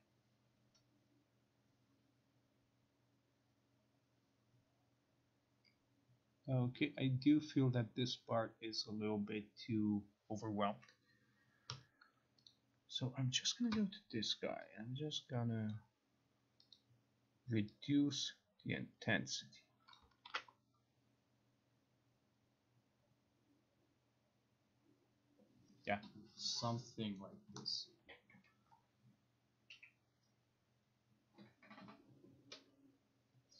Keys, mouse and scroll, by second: 12.5 click, 15.8 click, 16.8 click, 20.1 click, 20.3 ctrl+r.